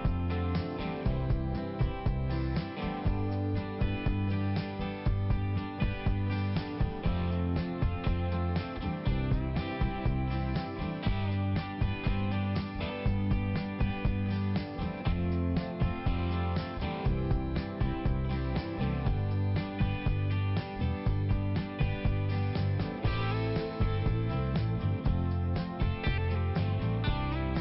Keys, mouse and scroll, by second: 5.2 click, 6.5 click, 9.1 middle click, 11.0 click, 16.0 middle click, 17.3 click, 18.1 click, 18.6 middle click, 19.5 click, 20.6 click, 21.4 click, 21.6 right click, 21.7 double right click, 22.3 m, 23.4 click, 23.6 m, 24.6 click, 26.1 click, 27.3 click.